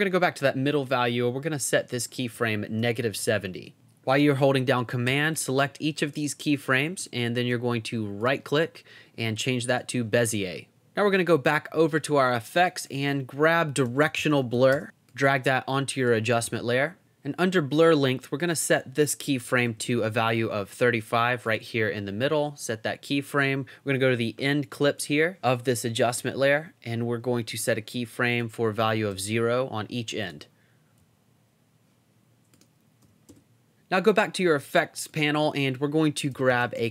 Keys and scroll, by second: 2.6-3.8 typing, 13.6-15.2 typing, 19.1-20.1 typing, 24.2 Down, 28.8 o, 29.1 Return, 31.0 Up, 33.0 o, 33.3 Return, 36.1-36.9 typing.